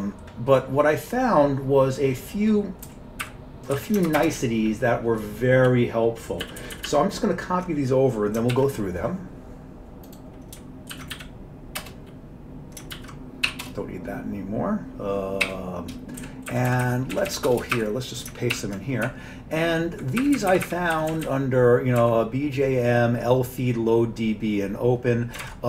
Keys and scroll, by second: 2.9 Down, 3.2 Up, 3.8 Down, 4.2 ctrl+shift+space, 4.4 ctrl+n, 4.6 ctrl+n, 5.1-5.8 ctrl+n, 6.5 ctrl+n, 6.6 ctrl+n, 6.9 ctrl+n, 8.6 alt+w, 11.0 ctrl+x, 11.2 k, 11.8 Return, 13.0 ctrl+x, 13.5 k, 13.7 Return, 15.5 y, 16.3 Down, 16.5 Up, 16.7 Up, 16.9 Up, 17.2 Down, 17.5 Return, 17.8 Up, 18.6 ctrl+y, 19.1 Up, 19.6-20.4 Up, 20.7 Up, 21.0 Down, 22.0 Up, 25.5 alt+Tab.